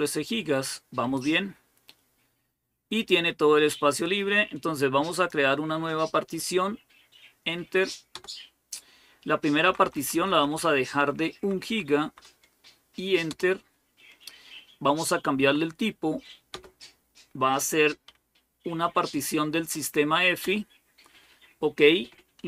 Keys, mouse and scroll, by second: 5.0-6.0 drag, 7.9 Return, 9.4 Left, 9.6 Left, 9.8 Left, 9.9 Left, 10.1 Left, 10.3 Left, 10.9 Delete, 11.2 Delete, 11.4 Delete, 11.8 Delete, 13.1 Return, 15.2 Right, 16.3 Return, 18.6 Up, 18.7-19.5 Up, 20.2 Return, 22.2 Down.